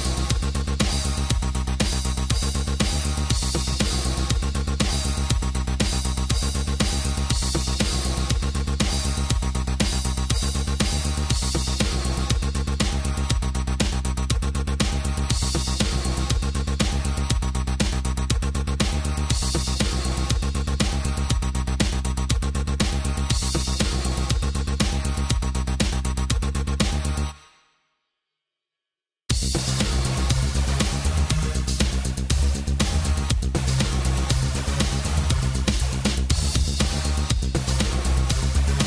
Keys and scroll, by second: 19.0 space, 27.9 space.